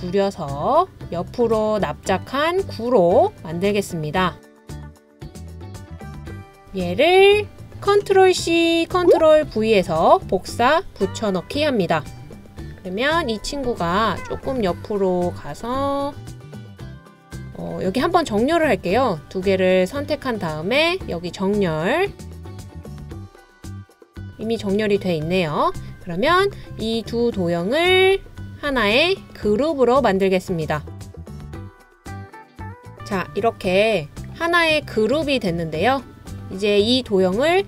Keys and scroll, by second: 9.4 super+c, 9.8 super+v.